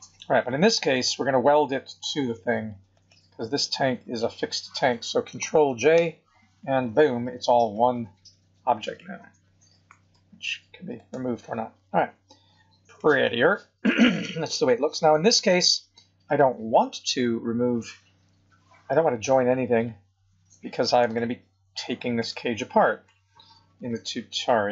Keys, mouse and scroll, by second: 0.9 click, 2.9 shift+click, 6.0 ctrl+j, 7.6 click, 8.8 click, 10.1 g, 12.0 scroll up 4, 12.9 middle click, 14.0 scroll down 4, 16.2 click, 18.3 KP_1, 20.0 scroll up 4, 21.1 shift+middle click, 23.0 g.